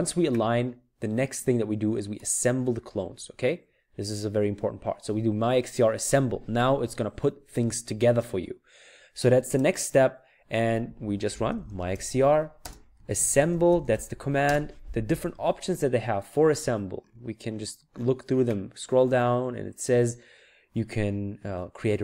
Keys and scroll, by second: 11.1-14.4 typing.